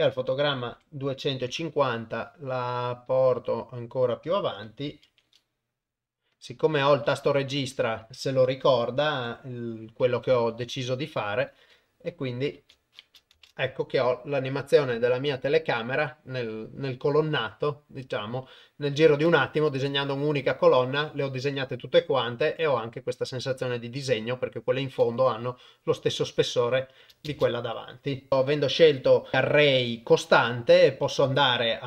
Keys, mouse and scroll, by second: 0.7 g, 4.9 g, 6.8 g, 8.1 g, 9.1 g, 12.6 shift+Left, 27.3 shift+space, 28.3 shift+Left, 31.0 Tab, 31.5 a.